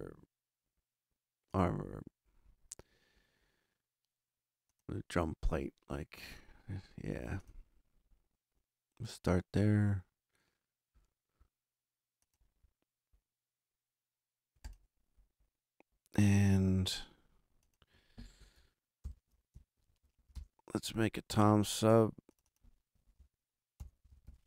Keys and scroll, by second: 19.0 shift+super+n, 19.7 shift+super+Right, 20.0 super+Down, 20.3 super+Return, 23.5-24.4 typing.